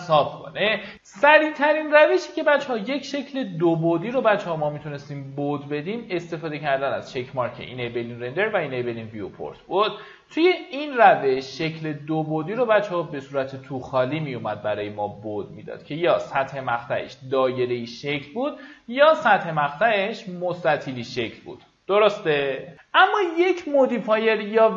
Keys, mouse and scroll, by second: 23.1 middle click, 24.1 click, 24.6 w.